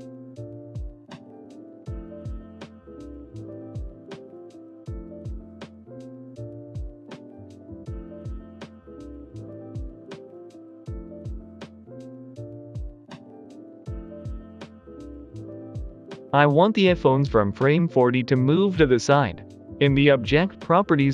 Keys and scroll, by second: 0.7-2.1 typing, 4.6-5.3 typing, 9.9 ctrl+j, 12.7 ctrl+j, 14.0-15.8 typing.